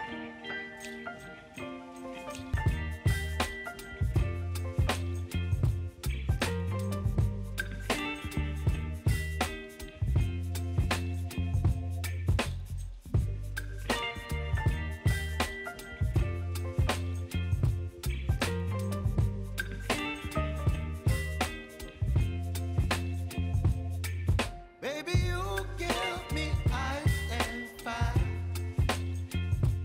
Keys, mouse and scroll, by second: 1.0 u, 2.2 click, 2.9 ctrl+c, 3.6 click, 5.2 ctrl+a, 6.0 ctrl+v, 7.1-8.7 typing, 10.9 click, 12.0 Page_Down, 13.9 alt+], 15.1 right click, 16.3 click, 18.9-19.2 typing, 20.0-21.4 drag, 21.7 u, 22.1 space, 25.0 space, 25.4-27.5 drag, 27.5 ctrl+a, 28.1 click.